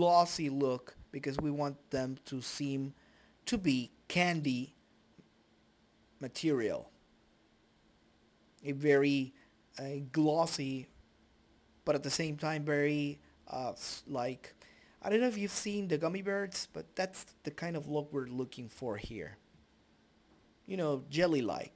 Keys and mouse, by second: 8.8 middle click, 9.2-10.7 right drag, 9.8-11.7 drag, 16.5 click, 18.0-20.2 drag, 20.7 click.